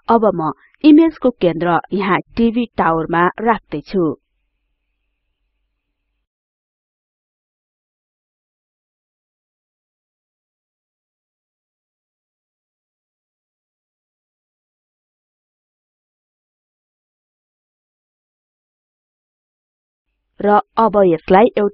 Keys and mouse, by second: 0.3-6.8 drag, 11.8-14.8 drag, 16.3-17.8 drag, 19.8 click, 21.3-21.7 drag.